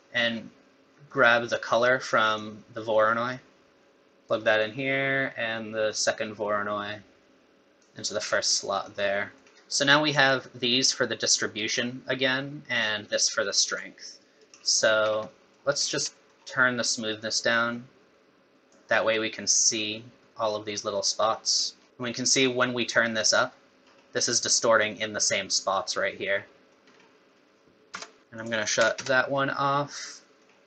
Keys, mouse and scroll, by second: 0.2-0.7 scroll up 3, 0.9 middle click, 2.3 click, 5.9 click, 8.3 scroll up 4, 8.9 middle click, 10.2 click, 13.1 click, 15.0-15.3 scroll down 6, 15.3 middle click, 15.8-16.1 scroll up 4, 16.1 middle click, 17.2 click, 21.2 middle click, 21.8 scroll up 1, 21.9 click, 23.8-24.2 scroll up 6, 26.2-26.6 scroll down 3, 26.6 middle click, 26.9-27.9 scroll up 3, 27.9 KP_0, 28.2 scroll down 7, 28.4 click, 29.8 middle click.